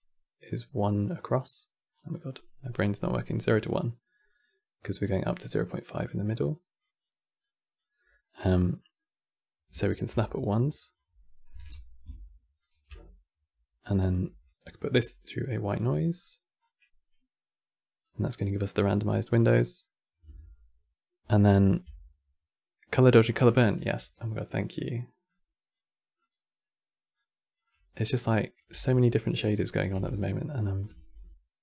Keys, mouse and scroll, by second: 0.0-7.7 typing, 1.7 right click, 2.4 click, 3.4 click, 4.5-5.0 drag, 5.3 click, 5.7 click, 6.5 click, 7.1-7.5 drag, 7.9-10.4 middle drag, 10.4-12.4 drag, 14.0 q, 16.3-18.6 drag, 18.6-21.2 middle drag, 21.2 ctrl+shift+click, 23.5 q, 25.0-27.6 drag, 27.6-28.1 middle drag, 28.1 click, 28.4 g, 28.9-29.3 middle drag, 29.3 click, 29.6 g, 30.5 click, 30.7 shift+d, 31.4-31.6 drag.